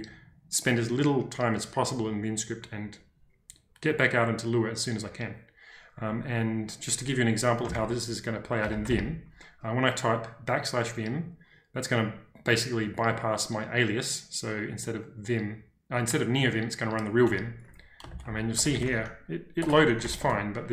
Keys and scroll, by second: 7.7-9.3 typing, 17.3-20.5 typing.